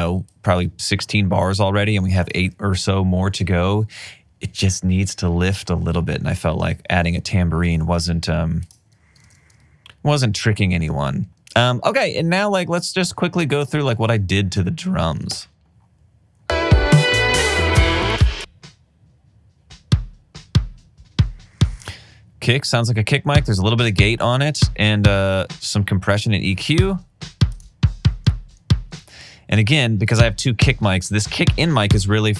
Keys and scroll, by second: 10.2 super+s, 15.3 space, 26.6 alt+super+w.